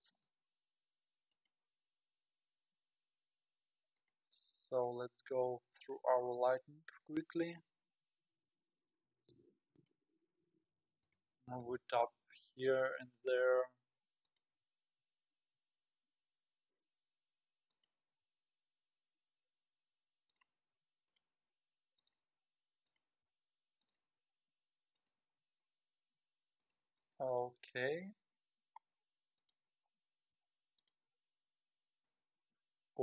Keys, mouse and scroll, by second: 0.3 click, 1.3 click, 4.8 click, 6.3-6.7 scroll up 7, 6.9 KP_7, 7.8 g, 11.0-11.7 drag, 12.2-12.7 scroll down 2, 13.1 click, 13.6 g, 14.7 g, 18.2 r, 20.8-24.3 typing, 26.6 drag, 27.0 click, 28.1 KP_3, 28.8-29.2 scroll down 4, 29.4 click, 30.3 r, 30.4 r, 31.0 h, 32.4 space.